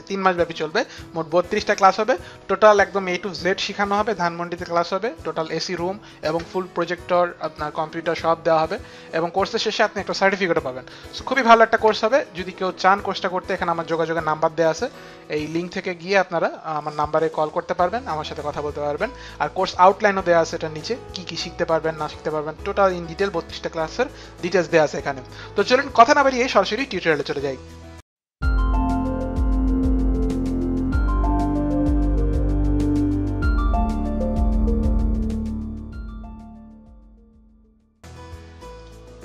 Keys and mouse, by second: 14.9 click, 38.8 click.